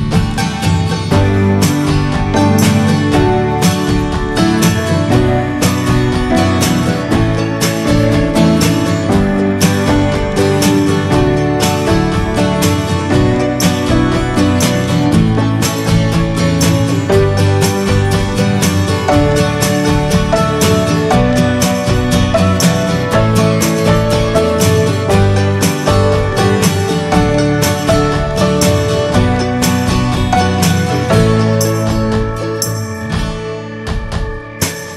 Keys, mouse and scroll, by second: 0.0 click, 0.3 middle click, 0.7 Tab, 1.3 Tab, 1.8 click, 2.0 ctrl+a, 2.5-2.8 middle drag, 2.8 Tab, 3.1-5.5 middle drag, 5.5 ctrl+r, 6.8 middle click, 7.3 click, 7.6 Tab, 7.9 middle click, 8.4 Tab, 9.0 shift+middle click, 9.7 ctrl+r, 10.8 Tab, 10.9 click, 11.1-12.2 middle drag, 12.2 Tab, 12.5 middle click, 13.4 ctrl+r, 14.2 Tab, 14.8-15.2 middle drag, 15.2 Tab, 15.6 middle click, 16.0 Tab, 16.2 click, 16.4-18.1 middle drag, 18.1 click, 18.6-21.3 middle drag, 21.3-21.7 scroll up 3, 21.7-22.1 middle drag, 22.1 ctrl+s, 22.3 click, 22.5 ctrl+a, 23.1 scroll down 2, 23.3 shift+middle click, 23.9 ctrl+s, 24.4 click, 24.7 scroll down 1, 24.9 middle drag, 25.2 ctrl+s, 25.7-26.7 shift+middle drag, 26.7 click, 27.3 ctrl+a, 28.2 click, 28.8-30.8 drag, 30.8 shift+d, 32.9-34.6 drag.